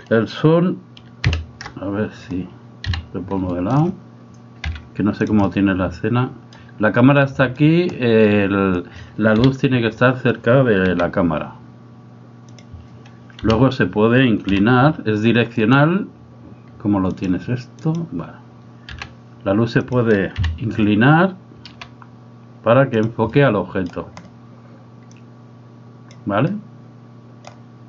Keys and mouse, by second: 1.3 KP_1, 2.9 KP_3, 3.5 shift+middle click, 4.7 g, 5.4-6.6 middle drag, 7.4 middle click, 9.4 KP_7, 11.0 g, 13.4 KP_1, 14.6 r, 17.2 click, 19.0 r, 20.4 KP_3, 21.8 r, 23.3 middle click, 25.1-26.1 drag, 26.6 middle click.